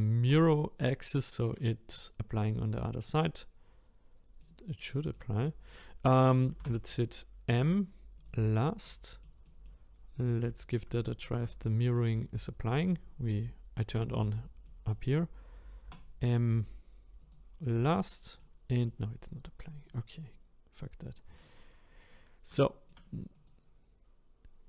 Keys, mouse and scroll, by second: 0.3-1.6 drag, 1.6-8.2 middle drag, 8.2 m, 8.8-10.6 middle drag, 10.6 click, 11.3 shift+click, 11.6-17.3 middle drag, 17.3 m, 17.9-19.8 middle drag, 19.8 click, 21.4 click, 21.8-22.7 scroll up 4, 22.7 shift+middle click, 23.5 click.